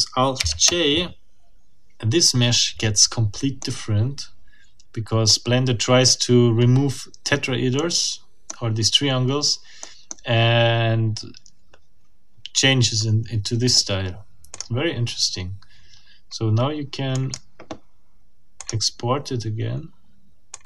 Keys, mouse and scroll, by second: 0.4 alt+j, 3.6-5.4 middle drag, 6.6-7.1 scroll up 2, 7.7 middle click, 9.8 middle click, 13.2-13.5 scroll down 1, 14.5 click, 17.1 click, 18.6 click, 20.5 click.